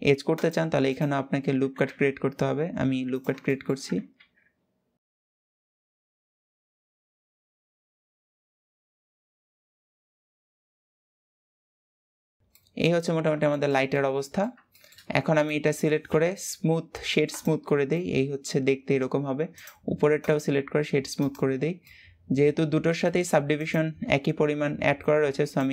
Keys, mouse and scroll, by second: 1.0-1.3 scroll up 1, 1.3 s, 3.1 shift+middle click, 3.9 ctrl+r, 5.2 s, 5.8 ctrl+r, 6.1 s, 6.3 ctrl+z, 7.4 s, 7.9 ctrl+r, 8.7 s, 9.2 Tab, 9.4 middle click, 9.5 scroll down 1, 9.6 shift+middle click, 10.1 Tab, 10.2 shift+middle click, 10.3 scroll up 2, 10.6 ctrl+r, 11.0 s, 11.4 g, 11.8 s, 12.3 Tab, 12.4-12.9 middle drag, 12.9 scroll down 2, 13.2-15.0 shift+middle drag, 15.0-17.4 right drag, 17.4 scroll down 2, 17.6-18.9 middle drag, 18.9-19.2 scroll up 1, 19.2 click, 19.9-21.4 right drag, 21.4 scroll down 2, 21.5-23.2 middle drag, 23.2 click, 24.2-24.6 scroll up 2, 25.1 click.